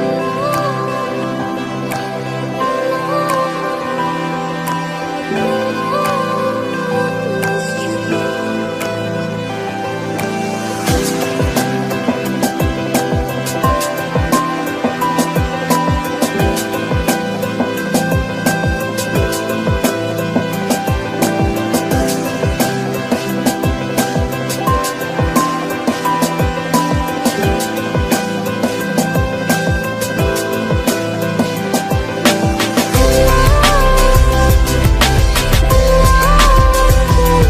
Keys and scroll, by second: 17.0 ctrl+j.